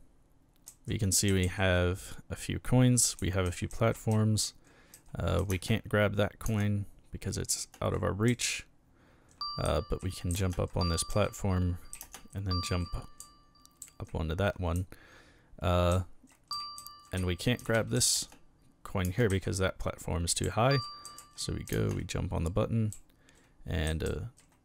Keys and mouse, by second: 0.7-6.4 typing, 7.5 space, 8.3 s, 9.7-14.8 typing, 15.9-19.3 typing, 20.4-24.6 typing.